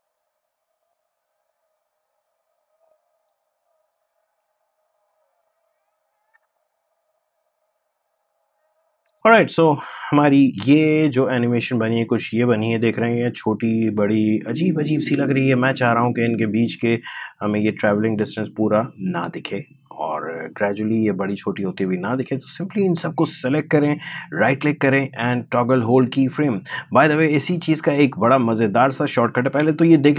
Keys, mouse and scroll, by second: 1.2 click, 2.3-4.4 drag, 4.4 click, 5.5-11.2 drag, 11.2 space, 19.1 space, 21.8-24.3 drag, 24.3 right click, 25.9-30.0 drag, 30.0 space.